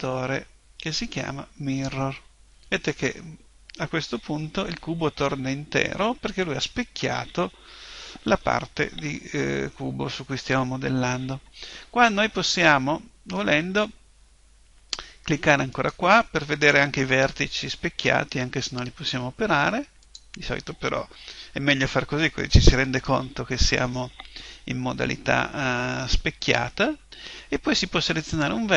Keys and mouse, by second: 4.6-9.1 middle drag, 9.1 KP_1, 15.7 click, 28.2 right click.